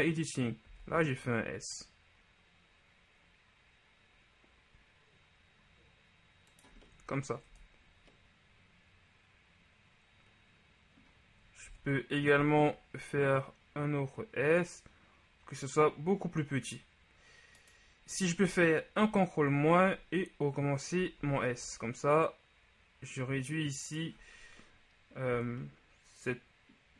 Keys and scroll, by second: 1.0 shift+s, 7.5 Tab, 12.0 Tab, 12.5 s, 19.1 ctrl+KP_Subtract, 21.3 s, 25.4 Tab.